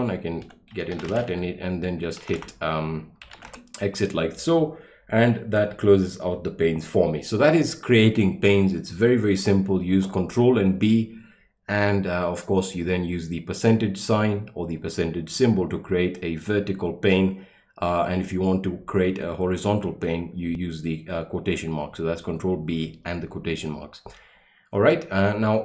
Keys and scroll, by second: 0.3-3.8 typing.